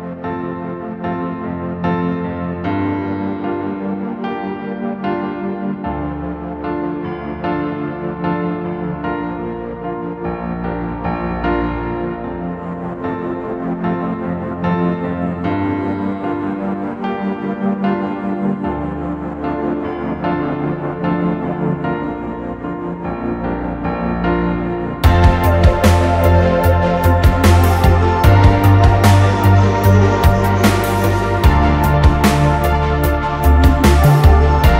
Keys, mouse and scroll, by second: 19.6 alt+click, 25.5 double click, 33.6 right click.